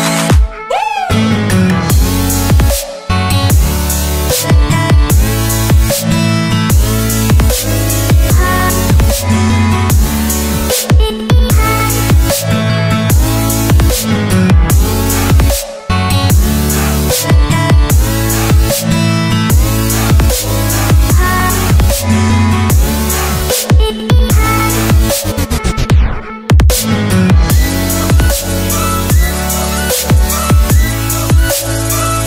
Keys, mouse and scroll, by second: 3.2 Delete, 5.9 click, 9.1 c, 9.5 click, 9.7 v, 10.3 t, 10.7 click, 12.4 Return, 12.7 Down, 12.9 Up, 13.3 ctrl+t, 13.5 click, 14.3 Return, 14.8 scroll up 1, 15.2 click, 19.3 click, 24.9 right click, 25.5 click, 25.9 click, 25.9 right click, 26.3 click, 28.0 scroll down 1, 28.8 click, 30.3 alt+Tab, 30.9 click, 31.3 ctrl+c, 31.4 click, 31.7 v, 32.1 click, 32.1 Return.